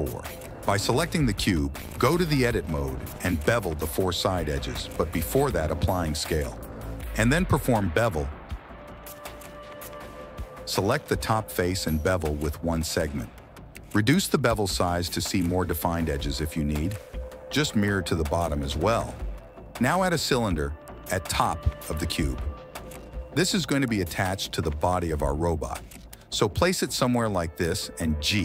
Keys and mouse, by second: 0.7 middle click, 2.8 Tab, 3.1 click, 3.4 shift+click, 4.2 shift+click, 4.4 middle click, 4.8 ctrl+b, 5.7 ctrl+z, 5.9 Tab, 6.1 ctrl+a, 6.4 Tab, 6.6 ctrl+b, 8.2 click, 9.0 Tab, 10.0 Tab, 10.6 alt+click, 10.9 middle click, 11.1 ctrl+b, 13.0 Tab, 13.7 shift+click, 14.8 shift+right click, 15.3 right click, 16.0 right click, 16.4 click, 16.9 Tab, 17.3 a, 17.3 q, 18.8 Tab, 19.8 middle click, 21.8 middle click, 22.1 g, 23.7 click, 25.1 KP_1, 26.1 shift+a, 27.8 s, 28.0 g.